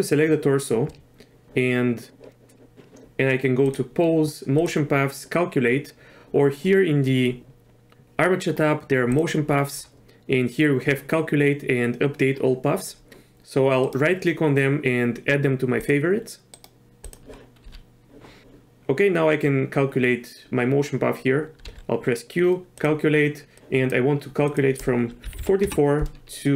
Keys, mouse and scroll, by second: 2.7 click, 3.6-5.6 drag, 9.1 click, 13.8-15.9 right drag, 16.5 right click, 17.6 q, 21.6 q, 25.4 KP_4.